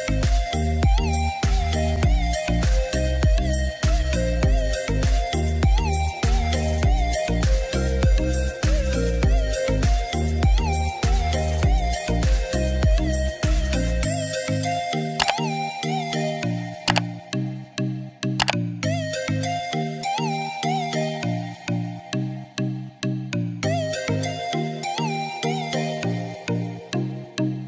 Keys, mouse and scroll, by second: 3.5 click, 3.5-6.3 drag, 7.3-19.5 drag, 21.9 click, 21.9 click.